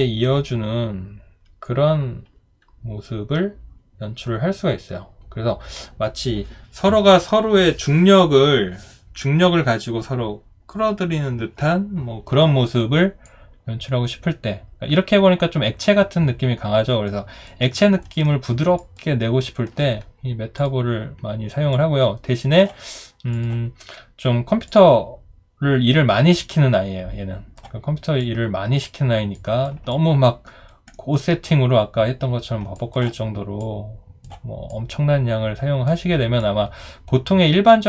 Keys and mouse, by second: 17.8 alt+right click, 18.2 alt+middle click, 18.8 alt+click, 19.2 alt+right click, 29.9 alt+click, 30.5 alt+right click, 30.9 alt+middle click, 32.7 alt+click.